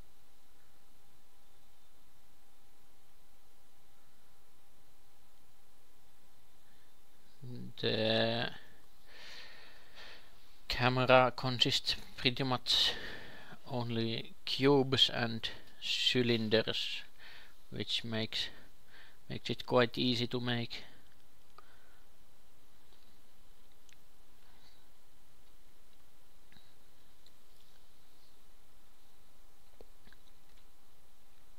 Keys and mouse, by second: 1.3-4.5 drag, 2.3 shift+a, 5.5 s, 6.2 g, 8.0 ctrl+a, 10.2 Tab, 10.9 KP_2, 13.6 ctrl+b, 17.5 Tab, 18.6 ctrl+shift+KP_2, 18.8 ctrl+shift+KP_3, 20.1 g, 23.8 shift+s, 24.7 shift+a, 26.8 s, 27.9 g, 30.6 g.